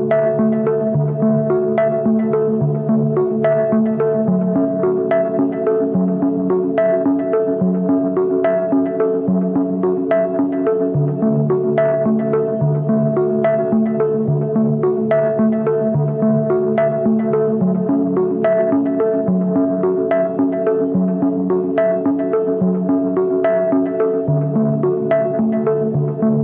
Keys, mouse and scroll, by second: 0.0 double click, 1.2 double click, 1.7 typing, 2.0 double click, 8.9 double click, 12.2 e.